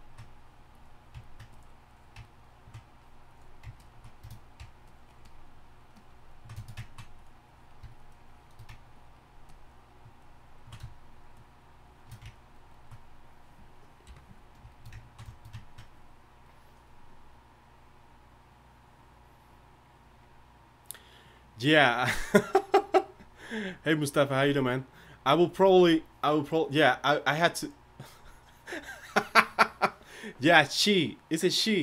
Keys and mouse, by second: 14.0 KP_1.